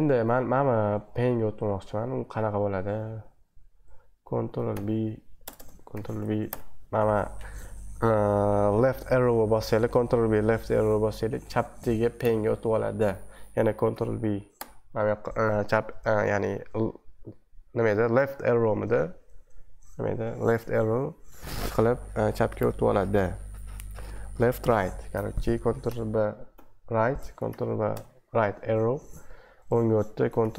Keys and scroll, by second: 5.5 BackSpace, 5.9 ctrl+b, 6.5 Left, 13.9 ctrl+b, 14.5 Left, 25.9 ctrl+b, 26.5 Right, 27.5 ctrl+b, 27.9 Right, 30.4 ctrl+b.